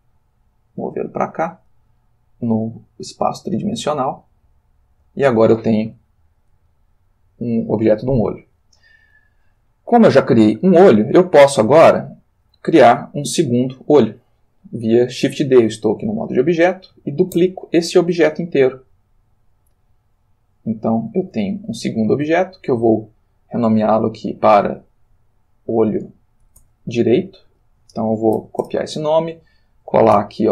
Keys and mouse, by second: 2.0-4.3 middle drag, 5.0 click, 6.7 ctrl+middle click, 17.3 shift+d, 20.1 click, 21.8 g, 22.5 click, 24.0 click, 25.0 click, 26.6 shift+d, 27.5 shift+Home, 28.3 ctrl+c, 28.6 ctrl+Return, 30.2 ctrl+v.